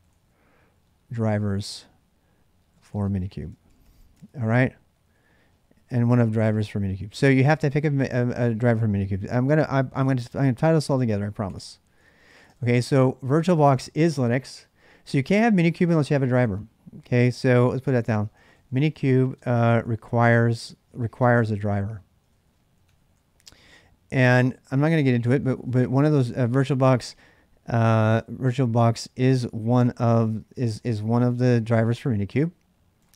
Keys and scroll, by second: 0.0-13.4 typing, 6.3 ctrl+[, 9.4 ctrl+[, 17.1-32.9 typing, 32.9 ctrl+[.